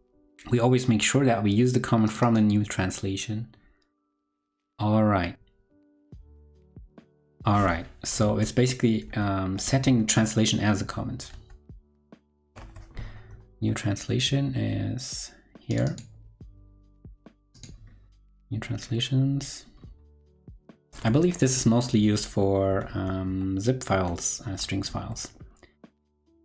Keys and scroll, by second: 8.4 ctrl+super+Left, 9.0 ctrl+super+Left, 9.6 ctrl+super+Right, 9.9 ctrl+super+Right, 11.3 ctrl+super+Left, 21.4 ctrl+super+Left, 22.0 ctrl+super+Left, 22.7 ctrl+super+Right, 22.9 ctrl+super+Right, 23.9 ctrl+super+Right, 24.9 ctrl+super+Right.